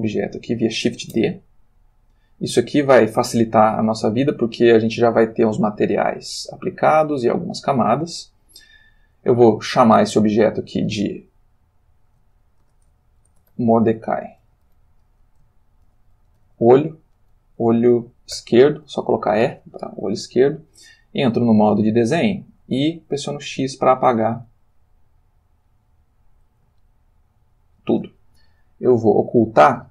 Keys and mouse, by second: 1.1 shift+d, 3.9 click, 5.1 click, 7.0 click, 10.0 click, 12.1-16.4 typing, 18.4 shift+e, 19.4 Return, 21.8 click, 22.3 click, 23.5 x, 25.7 click, 26.8-28.0 shift+middle drag.